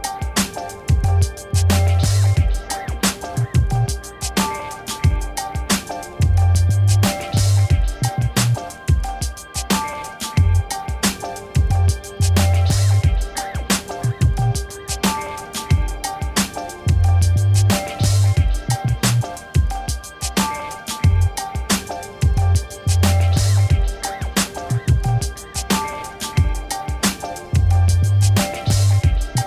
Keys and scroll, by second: 15.3 1, 15.8 6, 17.2 d, 17.4 a, 26.7 2, 26.9 0, 28.3 6, 29.3 c.